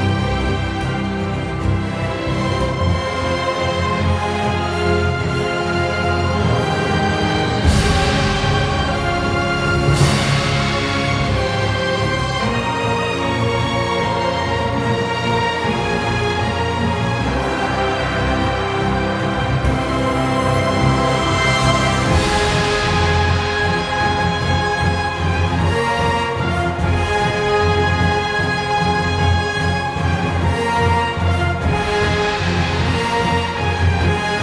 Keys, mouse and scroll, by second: 0.2 e, 5.8 shift+Num_Lock, 5.9 shift+z, 6.1 click, 6.7 ctrl+s, 7.1 shift+click, 7.8 ctrl+e, 8.4 click, 8.8 ctrl+e, 9.9 click, 10.5 e, 12.5-13.4 typing, 12.5 ctrl+z.